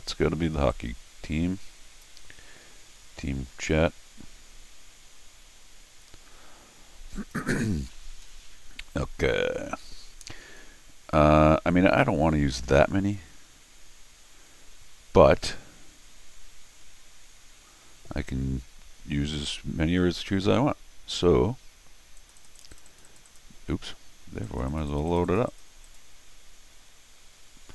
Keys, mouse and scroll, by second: 0.7-2.0 drag, 7.2 click, 8.3-8.7 scroll down 3, 22.2 click, 22.4 click, 22.6 click, 22.7 click, 22.9 click, 23.0 click, 23.3 click, 24.4 click, 24.7 click, 24.9 click, 25.1 click, 25.2 click, 25.5 click, 25.8 click.